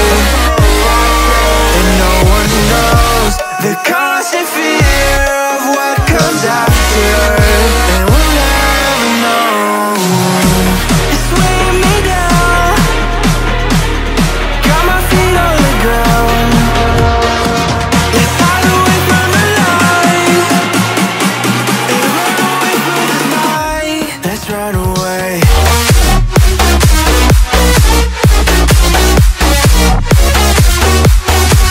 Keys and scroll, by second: 0.0-0.2 typing, 17.9 ctrl+v, 21.9 Return, 24.1 ctrl+[.